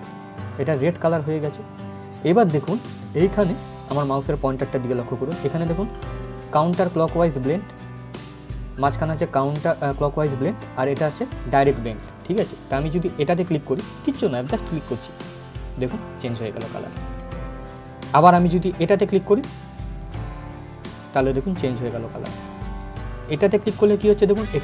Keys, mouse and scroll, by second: 0.2 click, 14.4 click, 22.5 click.